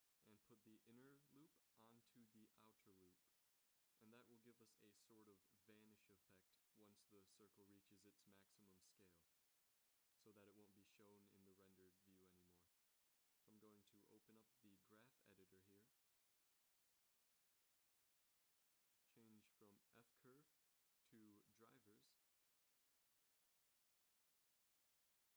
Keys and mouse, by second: 2.4 s, 6.6 middle click, 8.1 Tab, 9.7 shift+Tab, 11.6 ctrl+s, 20.4 click, 21.6 n.